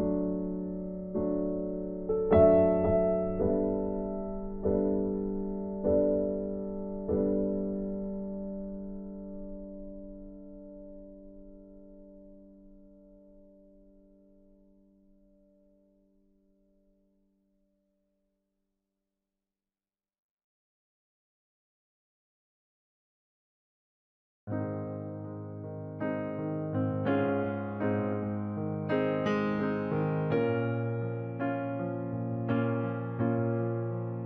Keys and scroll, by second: 30.0 ctrl+t.